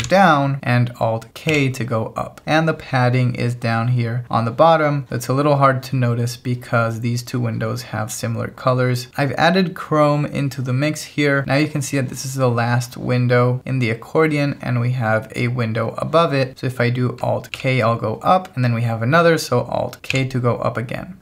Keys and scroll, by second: 0.0 alt+j, 1.5 alt+k, 17.5 alt+k, 20.2 alt+k.